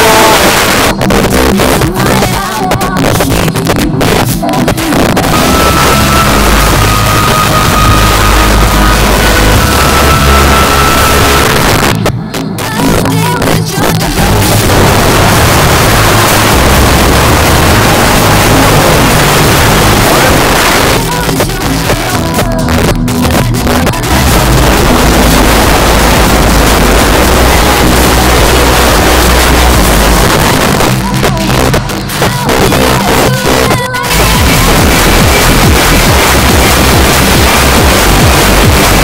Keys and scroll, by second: 0.5 Page_Down, 11.5 Page_Down, 20.4 Page_Down, 30.3 Page_Down.